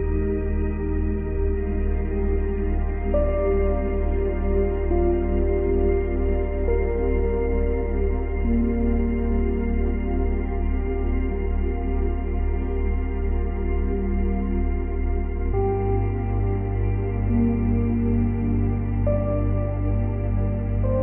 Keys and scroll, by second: 1.9 space, 3.5 space, 14.7 space, 17.5 space.